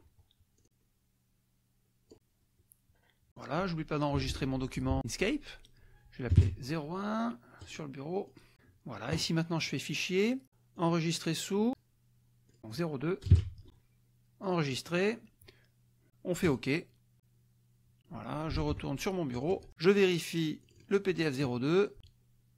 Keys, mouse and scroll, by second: 0.6-3.3 drag, 4.2 ctrl+s, 6.3 KP_0, 6.4 KP_1, 7.6 click, 8.3 click, 9.6 click, 10.8 click, 12.4 click, 13.2 KP_0, 13.8 KP_2, 14.4 click, 14.8 click, 16.4 click, 18.6 alt+Tab, 19.5 alt+click, 20.6 click.